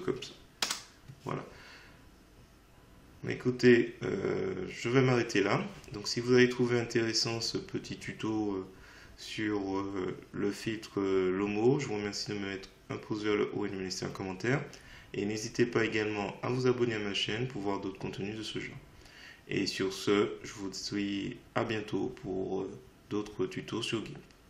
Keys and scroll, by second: 0.7 Return.